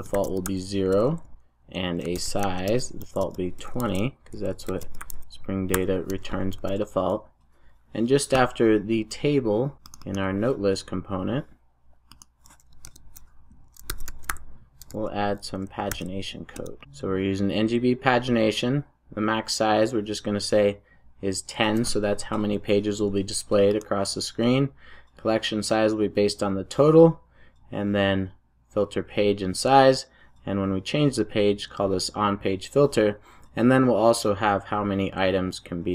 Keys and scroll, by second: 6.5 super+s, 15.8 super+j, 16.5 Return.